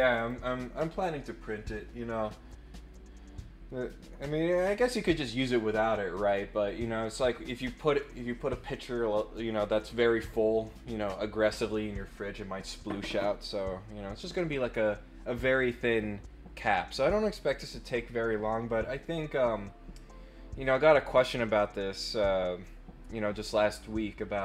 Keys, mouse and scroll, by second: 0.1 click.